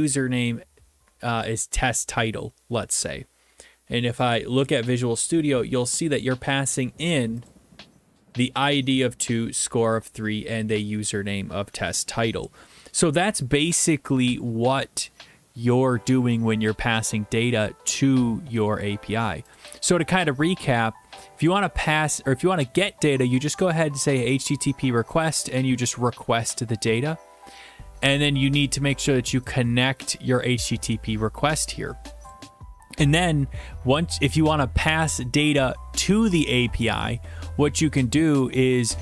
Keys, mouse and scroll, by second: 0.3 click, 4.4 click, 7.5-8.6 drag, 19.6-20.7 drag, 20.8 middle click, 20.9-22.4 scroll, 25.1 click, 25.5 click, 26.9 click, 28.0-29.1 scroll, 29.1 scroll, 32.3 click, 33.6 middle click, 33.7 middle click, 34.4 middle click, 35.4 middle click.